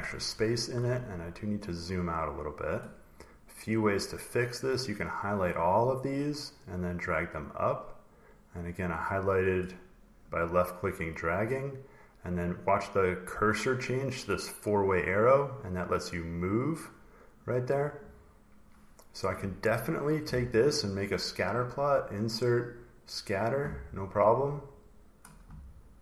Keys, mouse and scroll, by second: 0.0 scroll, 0.9-1.9 scroll, 2.7 scroll, 3.0 click, 5.0 click, 8.5 click, 9.4 click, 11.2 click, 16.1 click, 17.2 click, 19.6 click, 21.4 click, 22.3 click, 22.9 click, 25.0 click, 25.4 scroll.